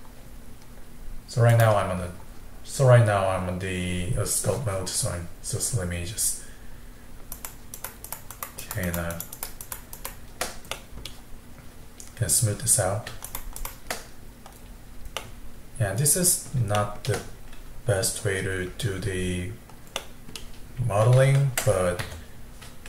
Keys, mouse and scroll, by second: 1.5-4.6 drag, 7.4-10.8 shift+drag, 10.8 middle click, 11.3-11.9 scroll down 1, 11.9 scroll up 2, 13.3-14.6 shift+drag, 14.6-15.2 scroll down 4, 15.2-19.9 middle drag, 20.0-21.2 middle drag, 21.2 ctrl+Tab.